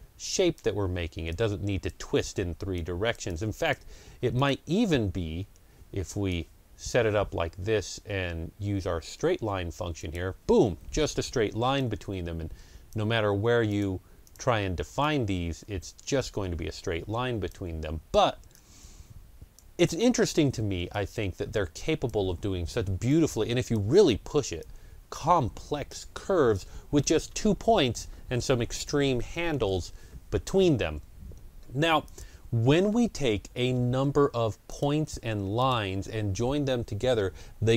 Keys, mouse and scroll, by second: 9.8-28.4 drag, 31.9-33.3 drag, 33.2 scroll down 1, 34.6 click, 35.5 click.